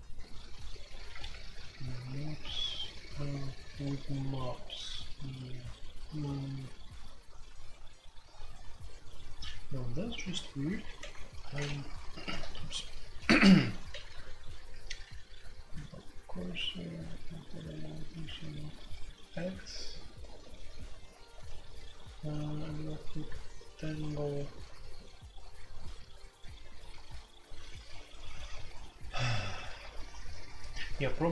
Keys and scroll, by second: 11.0 ctrl+o, 12.3 ctrl+t, 13.9-16.9 typing, 19.3 j, 19.3-20.2 l, 22.5 j, 22.7 j, 24.0 j, 24.6 j, 29.8-31.3 typing.